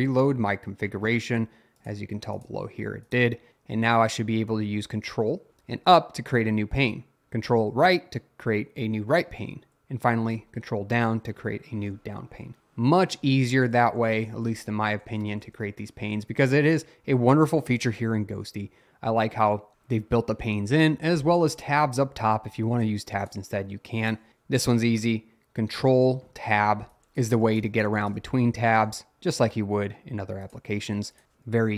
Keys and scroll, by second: 5.5 ctrl+Up, 7.8 ctrl+Right, 10.4 ctrl+Down, 13.0-15.8 typing, 27.0 ctrl+Tab.